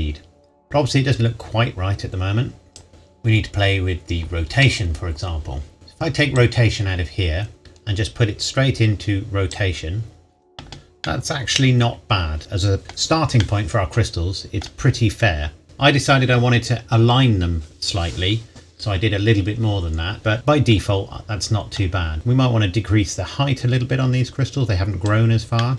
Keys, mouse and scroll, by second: 5.7 scroll up 1, 6.4 click, 11.1 middle click, 22.1 click, 25.6 middle click.